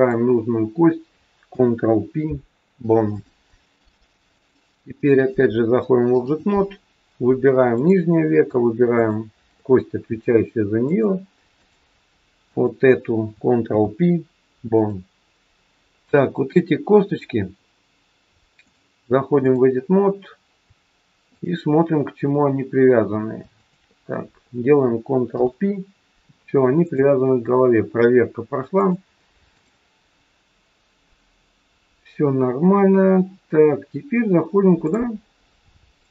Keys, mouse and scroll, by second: 1.4 ctrl+p, 4.4 click, 7.8 click, 8.9 shift+click, 10.9 click, 12.4 click, 13.7 ctrl+p, 15.9-16.8 scroll up 1, 17.0 click, 18.7 click, 21.4 shift+click, 23.5 shift+click, 25.3 ctrl+p, 26.8 click, 28.8 click, 34.9 click, 35.9 click.